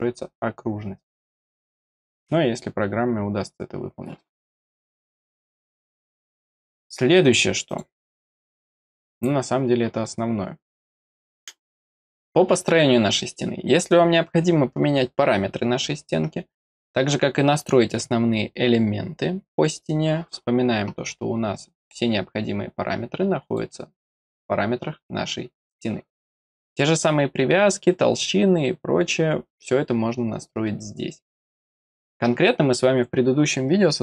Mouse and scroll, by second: 2.3 click, 6.7 click, 7.2 click, 7.6 click, 8.2 click, 23.4 click, 24.2 click.